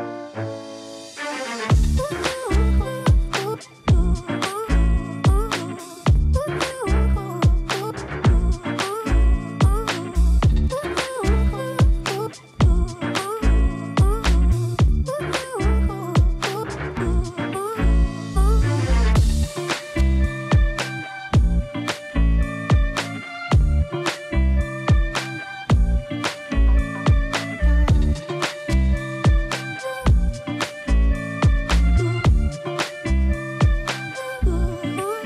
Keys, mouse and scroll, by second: 7.5 shift+3, 8.1 shift+0, 8.7 shift+Return, 11.2 shift+click, 20.3 ctrl+shift+d, 21.8 shift+click, 21.8 typing, 22.7-24.6 shift+scroll up 1, 24.6 shift+right click, 26.2-35.2 shift+drag, 26.2 typing, 28.6 typing, 32.4 typing.